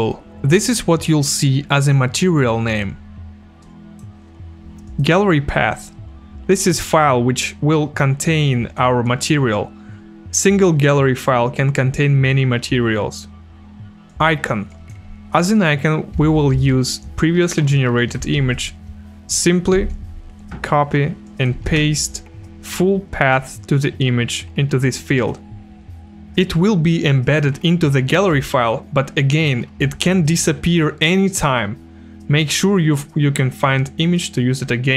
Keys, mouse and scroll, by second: 2.5 click, 3.6 click, 4.9 click, 10.4 click, 14.1 click, 17.9 click, 18.4 ctrl+a, 19.7 ctrl+c, 21.2 click, 21.6 ctrl+v.